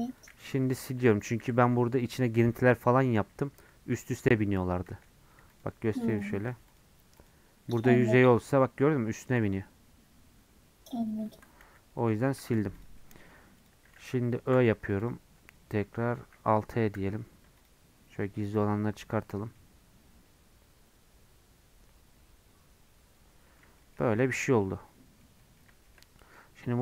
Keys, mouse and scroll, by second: 0.2 x, 0.5 Tab, 1.4 /, 1.8-4.9 middle drag, 4.9 Tab, 5.6 click, 6.2 click, 6.5 2, 6.8 click, 7.3 click, 7.6 f, 8.4-11.6 middle drag, 11.6 ctrl+z, 12.1 ctrl+z, 12.6 Tab, 12.8 click, 13.0-15.1 middle drag, 15.1 click, 15.4 /, 15.8 /, 17.0 alt+h, 17.7 click, 18.2-18.9 scroll down 1, 18.9 middle click, 19.3 scroll up 2, 19.6-22.6 middle drag, 23.8-26.8 shift+middle drag.